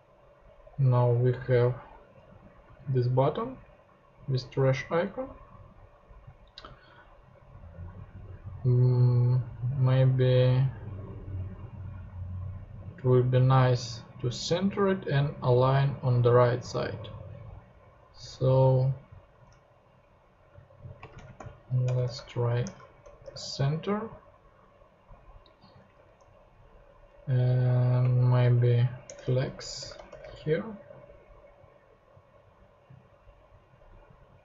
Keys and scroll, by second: 20.9-21.8 typing, 22.0 super+Tab, 22.9 super+BackSpace, 23.2 super+BackSpace, 25.9 super+Tab, 28.0-29.0 typing, 29.0 Return, 29.3 super+Tab, 29.9 super+BackSpace, 30.2 super+BackSpace.